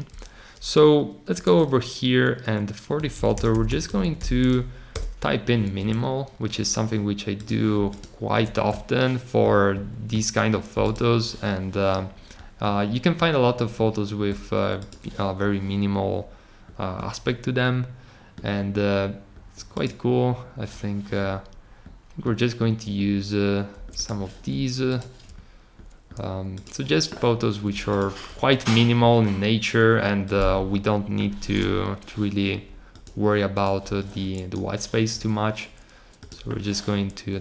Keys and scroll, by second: 3.5 n, 4.0 a.